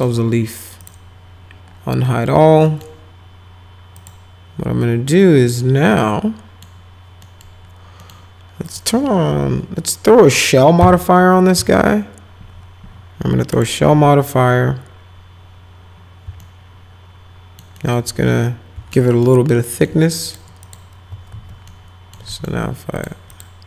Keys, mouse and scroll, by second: 0.0 right click, 0.8 click, 2.1 middle click, 2.7 right click, 4.0 click, 6.0 middle click, 7.2 middle click, 8.0 middle click, 8.7 click, 10.8 s, 11.6 s, 13.5 click, 16.4-17.6 alt+middle drag, 17.8 alt+middle click, 18.9 alt+middle click, 19.7 alt+middle click, 20.3 ctrl+click, 20.6 ctrl+click, 21.3 alt+q, 21.7 alt+middle click, 22.3 middle click, 23.0 click, 23.3 click.